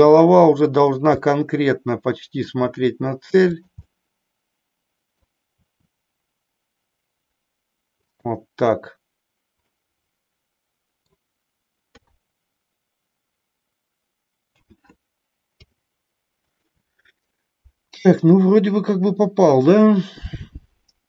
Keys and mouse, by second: 0.8 click, 1.3-2.4 middle drag, 2.7 r, 4.0-5.2 middle drag, 5.7 r, 8.2 click, 9.7-11.1 middle drag, 12.0 KP_3, 14.6 a, 15.4 i, 18.4-21.0 drag.